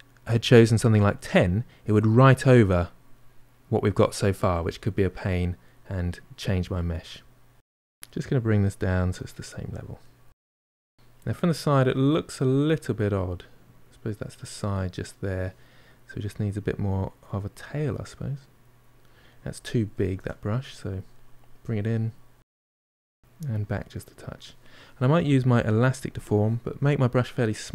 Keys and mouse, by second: 0.0-4.5 middle drag, 4.5 click, 5.4-7.5 middle drag, 7.5 click, 8.4-13.3 middle drag, 15.4-17.1 middle drag, 17.1-19.1 drag, 19.1 middle click, 19.7 ctrl+z, 19.9 ctrl+middle click, 20.5 click, 21.0 middle click, 21.7 click, 22.0 middle click, 22.9 click, 23.6-25.9 middle drag, 25.9-27.0 drag, 27.0 f.